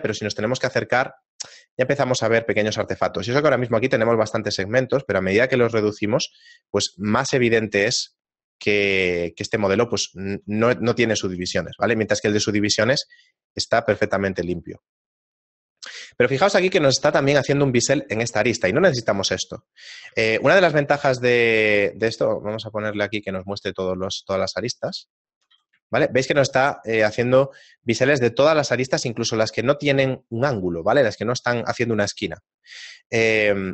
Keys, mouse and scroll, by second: 0.3-0.9 scroll up 4, 0.9 scroll up 1, 1.1 middle click, 3.5 click, 3.6 click, 6.2 shift+middle click, 7.2 scroll down 2, 8.0 shift+middle click, 8.0 scroll down 1, 11.4 shift+middle click, 12.4 shift+middle click, 14.2 middle click, 15.8 middle click, 16.1 scroll up 2, 18.7 scroll down 1, 18.8-19.6 scroll down 5, 19.5 middle click, 19.9 right click, 20.4 shift+middle click, 20.7 z, 22.1 shift+middle click, 23.4 click, 24.8 z, 25.3 shift+middle click, 25.7 z, 29.1 shift+middle click.